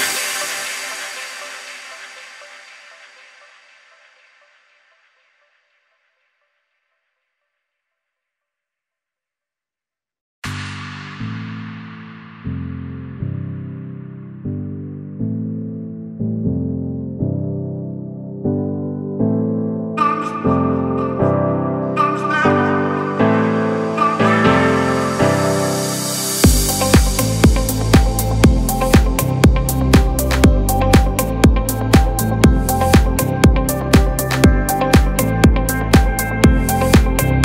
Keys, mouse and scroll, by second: 0.2 Return, 1.6 click, 2.3 space, 2.4 click, 2.8 space, 3.8 click, 6.3 ctrl+j, 8.8 click, 9.7 ctrl+z, 10.1 click, 10.8 ctrl+z, 11.3 click, 12.4 shift+Down, 13.1 typing, 13.9 shift+Down, 15.0-17.3 drag, 20.4 alt+scroll down 1, 21.5 click, 21.9-22.3 alt+scroll up 1, 22.6 click, 23.1 space, 25.7-34.1 drag, 34.4 click.